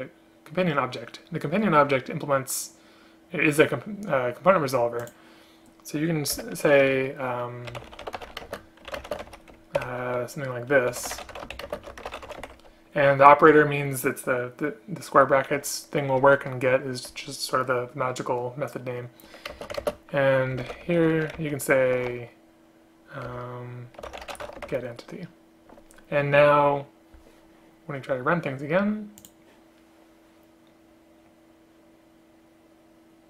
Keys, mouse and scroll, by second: 6.5 Return, 8.6 space, 9.1 space, 11.8 shift+space, 19.6 space, 19.9 space, 23.4 Return.